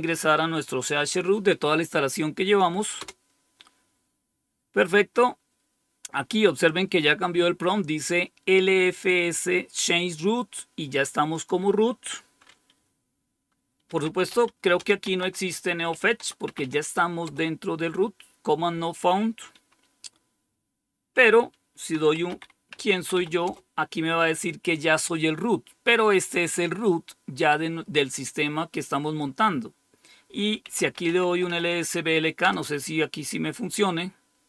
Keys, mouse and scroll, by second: 2.9 Return, 11.3 click, 13.7-17.0 typing, 17.2 Return, 21.6-23.6 typing, 26.8 click, 29.1 click, 30.5-31.9 typing, 32.3 Return.